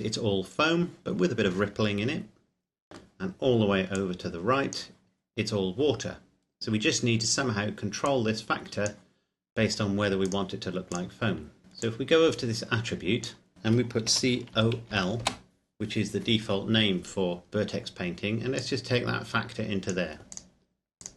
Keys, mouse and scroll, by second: 4.2 click, 8.2 click, 11.6 shift+middle click, 11.8 click, 14.1-14.9 typing, 15.2 Return, 18.7 click.